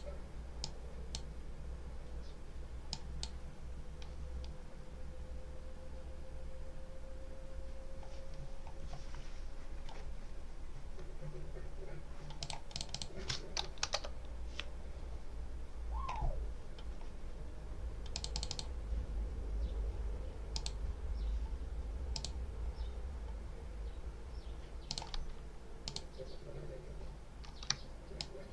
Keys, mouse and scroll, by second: 0.5 click, 2.8 click, 8.2 scroll down 1, 8.7-9.2 scroll up 1, 10.6 scroll up 1, 11.7 scroll up 1, 12.3 click, 13.7 2, 13.8 Return, 17.2 scroll up 2, 18.0 click, 20.4 click, 22.0 click, 24.7 click, 25.7 click, 28.1-28.5 ctrl+drag.